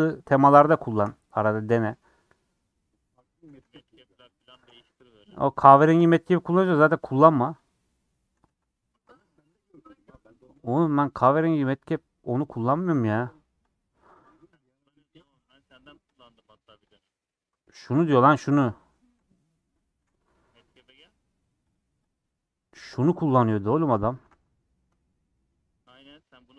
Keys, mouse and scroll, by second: 0.3 shift+Left, 0.9 shift+Left, 1.4-1.7 scroll down 3, 1.7 middle click, 2.1 scroll down 4, 2.2 middle click, 2.5-3.2 scroll up 5, 3.0 middle click, 3.6 1, 4.3 click, 5.9 shift+click, 6.1 g, 7.6 click, 8.5 3, 9.1 a, 9.3 u, 11.8 click, 12.5-20.0 drag, 20.0 z, 21.6-23.9 drag, 23.9 middle click, 24.3 Tab, 24.4 scroll down 4, 24.8-26.5 middle drag.